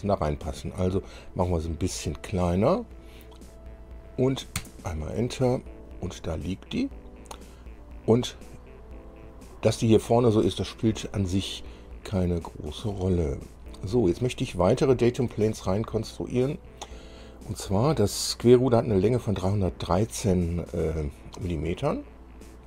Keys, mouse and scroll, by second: 13.2 scroll down 2, 13.7 middle click, 14.8 shift+middle click.